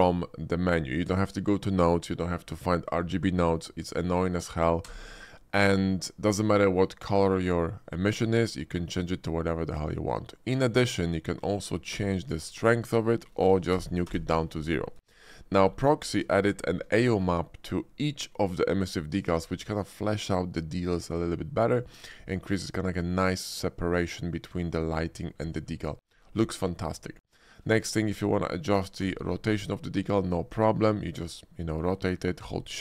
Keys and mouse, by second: 4.8 d, 11.9 d, 15.0 ctrl+z, 16.0 shift+click, 16.3 drag, 17.0 shift+click, 21.8 shift+middle drag, 27.4 shift+click, 28.0 middle click, 28.9 d.